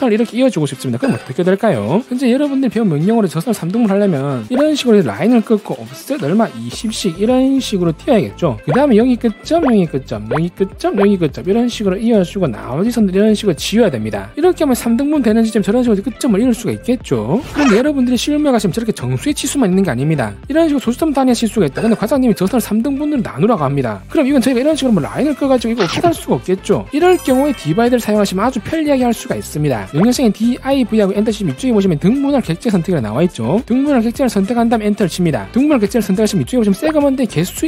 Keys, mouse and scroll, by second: 4.8 click, 5.2 click, 5.9 3, 6.3 2, 7.3 click, 7.7 click, 8.0 click, 8.2 click, 8.6 1, 8.7 click, 9.1 right click, 9.8 right click, 10.0 click, 10.3 click, 10.6 click, 11.4 click, 11.6 right click, 12.0 e, 12.1 right click, 12.2 click, 12.8 click, 13.4 click, 13.7 right click, 24.7 1, 24.9 click, 25.2 click, 25.6 click, 25.8 click, 26.6-29.8 middle drag, 30.6 d, 31.3 v, 34.8 click, 36.4 click.